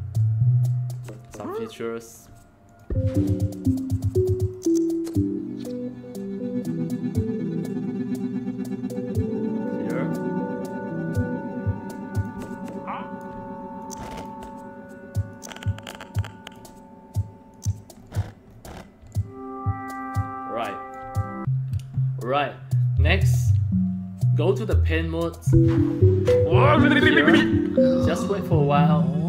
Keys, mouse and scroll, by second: 1.3 alt+click, 2.6 click, 4.4-12.2 drag, 12.5 alt+click, 13.7-14.2 drag, 15.2 click, 17.5 click, 17.9 scroll up 1, 18.4 scroll up 3, 19.1-20.9 alt+drag, 21.1 scroll up 1, 25.2 click.